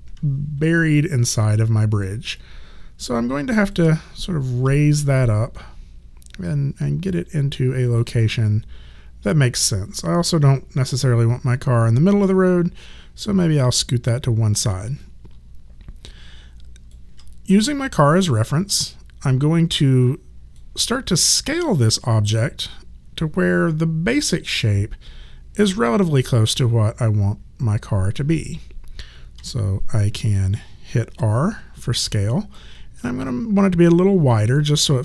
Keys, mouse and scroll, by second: 0.7 alt+right click, 2.4 alt+click, 4.6 w, 5.3 click, 10.3 alt+click, 13.2 click, 15.0 alt+click, 18.0 click, 29.4 r, 30.3 click, 31.1 r, 33.2 alt+click.